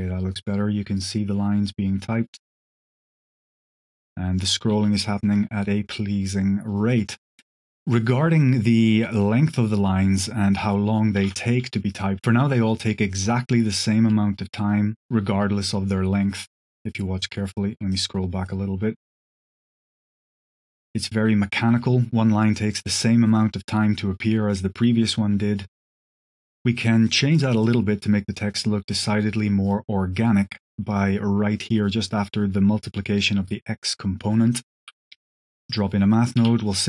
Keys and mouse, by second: 4.6 space, 5.1 click, 7.0 middle click, 8.9 drag, 9.3 g, 17.8-18.4 drag, 19.1 space, 26.1 click, 27.0 middle click, 27.5 click, 28.9 middle drag, 29.5 click, 30.8 click, 32.1 click, 34.5 click, 36.1 click, 36.1 q.